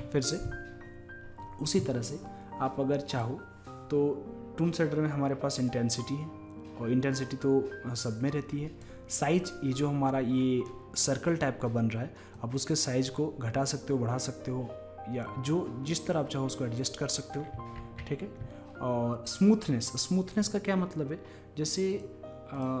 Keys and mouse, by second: 3.2-5.1 drag, 5.8-7.7 drag, 12.4-17.9 drag, 17.9 ctrl+z, 22.0-22.8 drag.